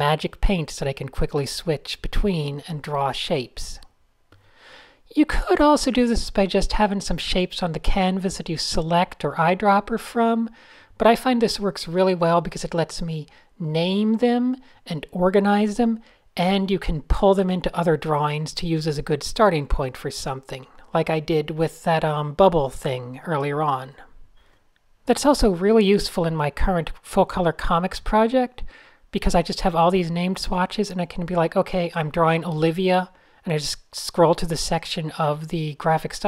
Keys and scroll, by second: 0.5 alt+shift+super+j, 0.9 shift+super+a, 1.1 n, 2.2 Tab, 2.6 Tab, 2.8 super+0, 4.8 Tab, 5.4 a, 7.3 shift+super+a, 7.9-8.8 typing, 10.2 super+z, 12.7 Tab, 12.8 typing, 13.5 shift+super+a, 14.5 Tab, 14.9 Tab, 15.7 Tab, 15.9 p, 18.6 super+z, 20.4 shift+super+a, 21.2 Tab, 22.1 e, 23.0 shift+super+}, 23.5 shift+super+a, 23.5 Tab, 23.5-25.4 typing, 24.5 super+space, 25.4 Tab, 28.5 x, 29.6-33.5 typing, 32.7 shift+super+a.